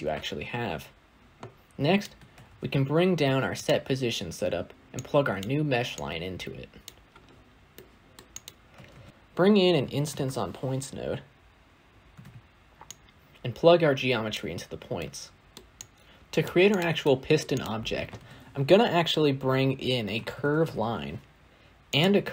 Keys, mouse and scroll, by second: 2.3 ctrl+shift+d, 5.3 click, 6.7 click, 14.2 click.